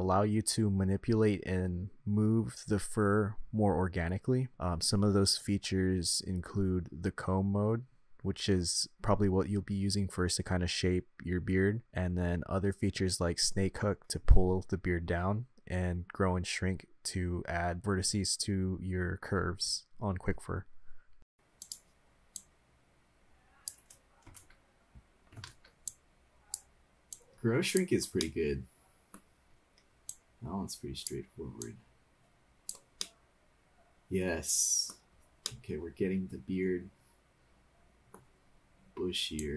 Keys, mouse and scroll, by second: 0.0-0.7 drag, 1.1-1.9 drag, 2.5 middle click, 3.0-3.4 drag, 4.0 click, 4.7 click, 5.7 click, 6.2-7.1 middle drag, 8.3 middle click, 9.2-9.7 drag, 10.2-10.8 drag, 12.8-13.8 middle drag, 14.5 middle click, 19.9 middle click, 21.2 click, 21.6 click, 22.3-23.7 drag, 25.5 ctrl+z, 25.9 click, 27.1-28.2 drag, 28.2 middle click, 30.1-31.1 drag, 31.6-32.8 drag, 33.0-34.9 middle drag, 35.1-35.4 scroll down 2, 35.4-38.1 middle drag, 38.3-39.1 scroll up 5, 39.4 click.